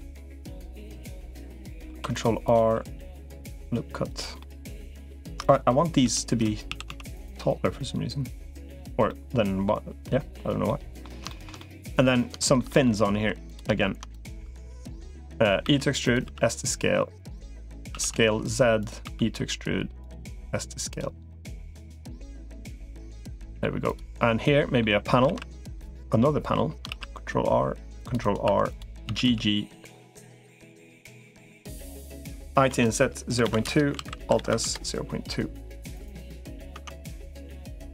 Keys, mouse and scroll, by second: 0.9 middle click, 1.7 ctrl+r, 2.5 s, 4.2 middle click, 5.9 l, 6.5 s, 8.9 middle click, 10.5 middle click, 11.1 shift+middle click, 11.4 middle click, 12.2 shift+middle click, 12.5 middle click, 13.1 3, 13.3 click, 15.5 e, 16.1 s, 17.7 s, 18.9 e, 20.1 s, 21.3-22.9 drag, 23.0 middle click, 23.7 click, 24.2 middle click, 25.1 ctrl+r, 26.7 ctrl+r, 28.3 2, 28.9 g, 31.1 3, 31.7 shift+click, 32.5 i, 33.9 alt+s, 36.5 Tab, 36.9 click, 37.1-37.9 middle drag.